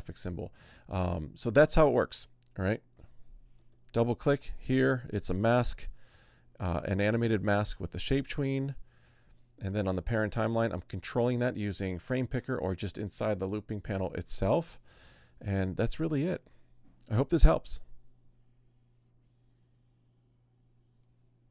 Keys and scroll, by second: 2.9 super+=.